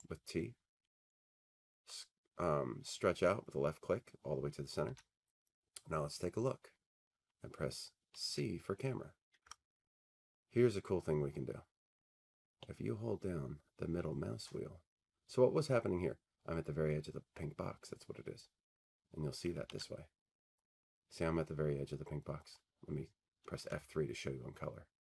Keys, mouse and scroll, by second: 1.9 click, 2.4-3.9 scroll, 5.7 scroll, 5.8 middle click, 6.4 middle click, 6.6 middle click, 8.3 c, 9.4 F3, 12.6-14.9 middle drag, 19.3-21.8 middle drag, 19.8 alt+w, 22.1 scroll, 23.7 F3.